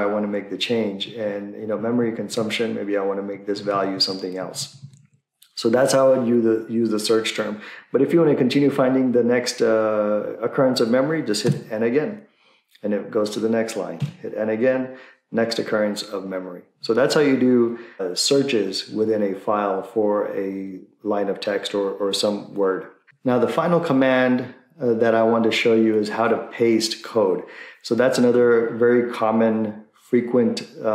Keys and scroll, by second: 1.1 Right, 1.7 Right, 2.2-3.3 Right, 3.5 Right, 3.6 Right, 3.9 Right, 4.4 Left, 4.6 Right, 4.8 Right, 5.0 Left, 11.5 n, 14.0 n.